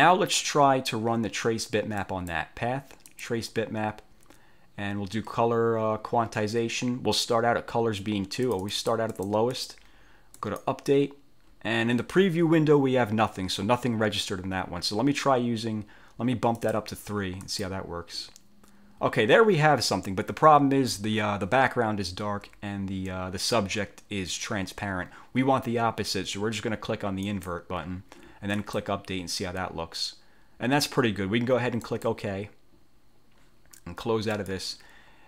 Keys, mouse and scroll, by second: 2.2 click, 3.2 click, 8.6-9.6 drag, 10.5 click, 16.7 click, 17.6 click, 27.4 click, 28.6 click, 32.0 click, 34.4 click.